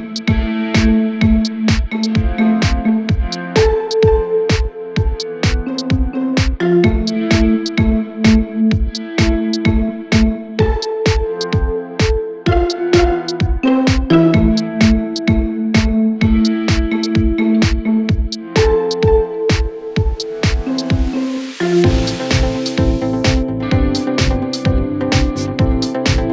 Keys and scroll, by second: 17.1 g.